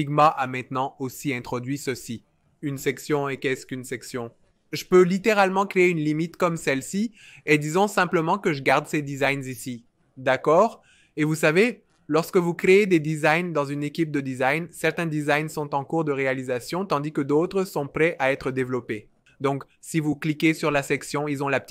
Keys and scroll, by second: 6.6 v.